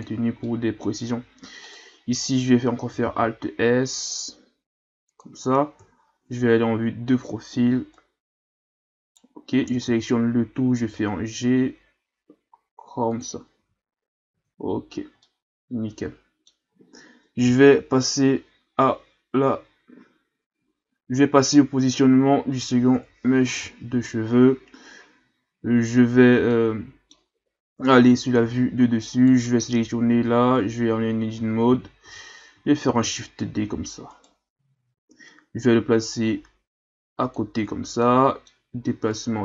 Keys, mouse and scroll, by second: 0.4-1.6 middle drag, 1.6 right click, 3.0 alt+s, 5.8 KP_3, 7.9 right click, 9.6 a, 9.9 a, 10.8 g, 13.6 a, 14.3 Tab, 14.6 a, 14.8-15.2 scroll down 3, 15.2-18.2 middle drag, 22.9 KP_1, 25.6-26.5 scroll up 1, 26.5-27.8 middle drag, 27.8 KP_7, 29.1 right click, 29.7 scroll up 1, 30.1 Tab, 31.3 a, 31.7 a, 32.0 a, 32.8 shift+d, 36.1-38.0 drag, 38.0-39.1 middle drag, 39.1-39.4 drag.